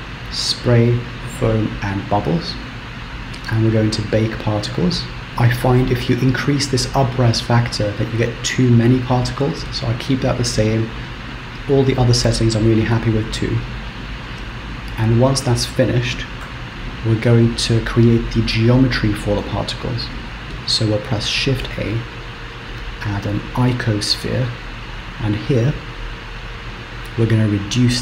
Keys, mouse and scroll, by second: 0.6 click, 1.8 click, 2.1-3.9 scroll down 9, 3.9 click, 5.3 scroll up 3, 13.2-16.5 scroll down 2, 16.9 KP_1, 17.4-18.3 scroll down 5, 18.5 shift+middle click, 20.1 scroll up 3, 21.0 scroll down 5, 21.5 shift+a, 25.6 click.